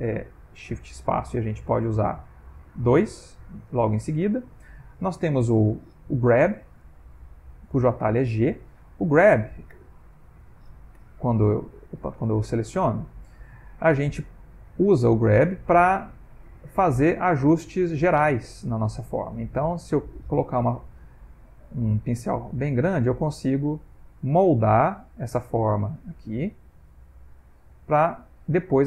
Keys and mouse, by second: 1.1 shift+space, 1.8 shift+space, 6.4 shift+space, 9.8 f, 15.5 f, 16.5 click, 17.3 click, 18.2 click, 18.9 click, 19.7 g, 20.7 f, 22.2 click, 23.0 click, 23.8 click, 24.6 click, 25.3 click, 25.9 click, 26.4 click, 26.9 click, 27.5 click, 28.3 middle click.